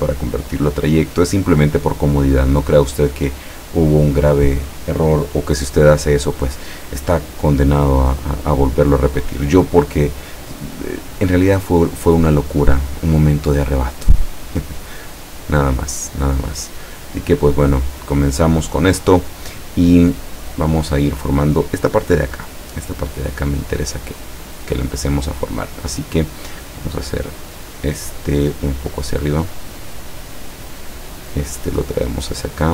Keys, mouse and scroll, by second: 0.1 click, 0.6 click, 6.0 click, 13.5-14.6 drag, 15.2-19.1 drag, 24.3 click, 27.4-31.0 drag, 32.1-32.7 drag.